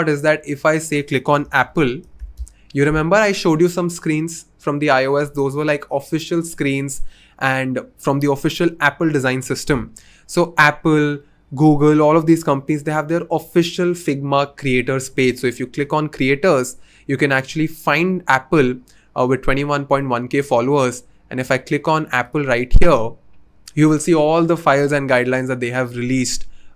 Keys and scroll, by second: 1.2-2.7 typing, 4.1 typing.